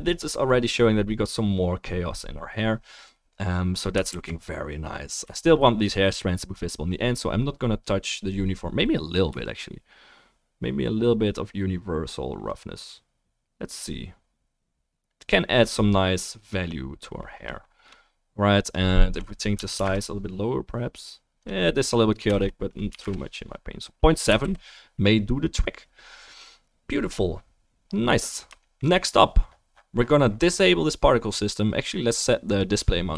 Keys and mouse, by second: 1.8-2.2 middle drag, 4.1 ctrl+s, 24.5 ctrl+s.